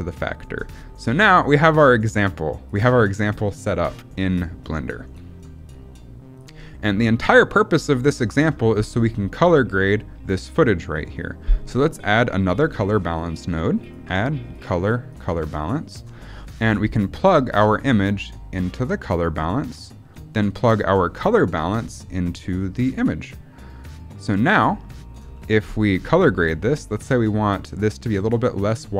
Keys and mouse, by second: 2.0 click, 3.0 middle click, 5.2 middle click, 5.6 click, 6.5 middle click, 11.3 middle click, 13.8-15.9 drag, 16.4 middle click, 17.5-19.2 drag, 21.2-22.8 drag, 24.1 click, 25.4 middle click.